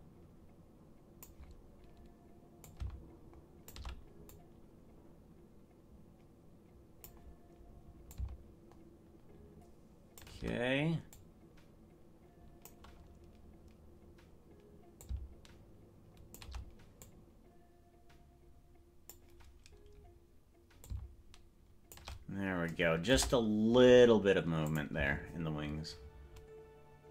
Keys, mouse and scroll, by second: 2.6-3.7 drag, 4.3-7.1 drag, 8.1-10.2 shift+drag, 11.2-12.8 drag, 15.0-16.4 shift+drag, 17.1-19.2 drag, 20.8-22.0 shift+drag, 23.2 KP_0, 24.7 click, 25.0 space.